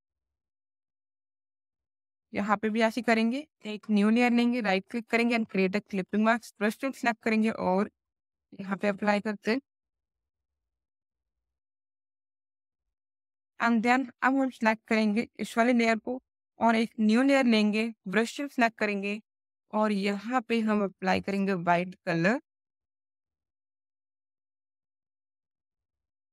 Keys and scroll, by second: 6.3 alt+b.